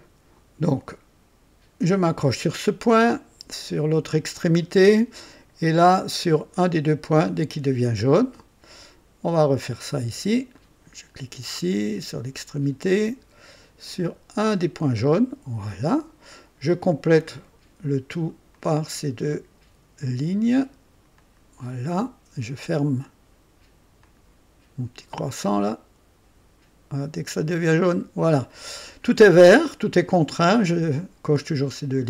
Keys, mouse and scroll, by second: 2.0 click, 4.3 click, 7.5 click, 10.5 click, 12.4 click, 14.9 click, 16.9 click, 18.5 click, 21.1 click, 24.0 click, 27.7 click.